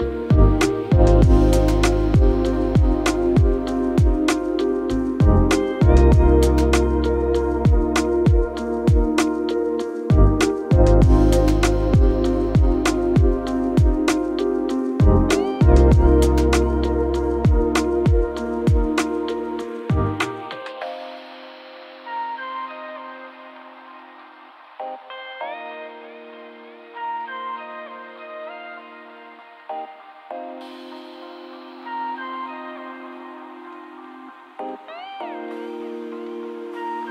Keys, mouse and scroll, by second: 1.5 1, 2.0 0, 2.3 Return, 4.7 5, 5.2 Return, 9.7 4, 10.2 Return, 16.6 8, 17.0 Return, 19.2 1, 19.6 2, 20.1 Return.